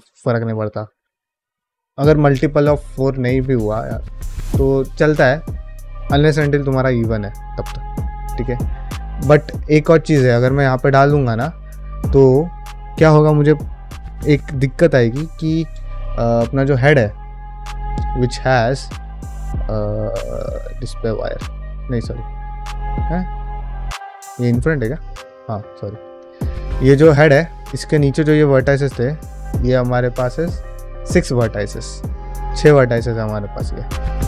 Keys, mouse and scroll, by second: 8.2-8.5 middle drag, 9.1 shift+middle drag, 10.5 middle click, 11.7 shift+middle drag, 15.0 drag, 15.7 shift+middle drag, 17.3 click, 17.9 middle click, 18.4 middle click, 18.7 click, 18.9 q, 21.1 ctrl+middle click, 21.6 q, 23.4 middle drag, 23.7 drag, 24.1 click, 24.7 q, 25.4 click, 25.7 middle click, 26.0 drag, 26.4 ctrl+middle drag, 26.7 shift+middle drag, 27.1 Tab, 27.4 alt+z, 27.7 middle click, 28.4 click, 28.8 alt+click, 29.3 shift+middle click, 30.2 ctrl+middle click, 31.6-34.0 middle drag, 34.1 alt+z.